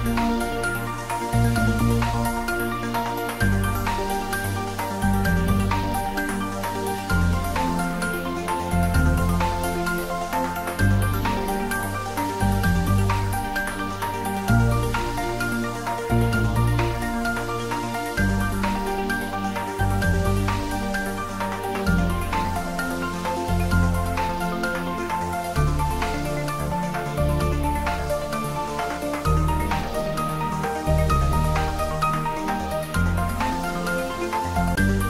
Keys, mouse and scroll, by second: 0.0-0.7 typing, 2.5-3.7 typing, 4.8 z, 6.0 click, 6.3 s, 7.8 click, 8.4 scroll down 1, 8.9 s, 10.0 click, 10.3 s, 12.6 click, 13.0-13.4 scroll down 1, 13.4-14.3 middle drag, 15.1 click, 15.4-16.4 scroll up 1, 16.2-17.1 typing, 18.5 click, 19.1 scroll up 1, 20.0 g, 20.6 x, 22.4 click, 22.7-23.4 middle drag, 24.4 click, 24.8 Tab, 25.3-27.2 middle drag, 27.6 s, 28.0 z, 29.7 click, 31.0 g, 31.4 z, 32.2 click.